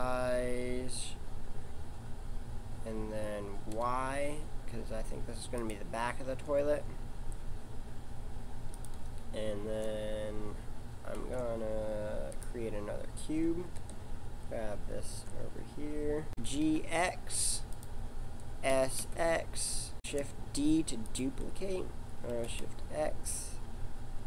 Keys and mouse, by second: 6.2 g, 11.1 shift+a, 13.6 g, 16.4 g, 18.7 s, 19.9 shift+d, 22.3 s.